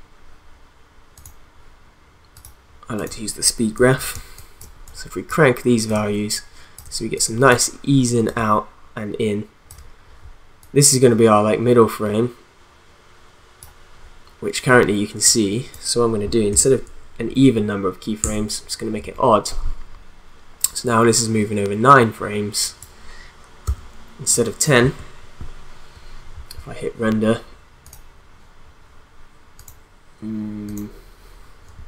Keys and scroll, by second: 4.1 space, 18.2 alt+Left, 23.7 b, 24.8 n, 31.7 space.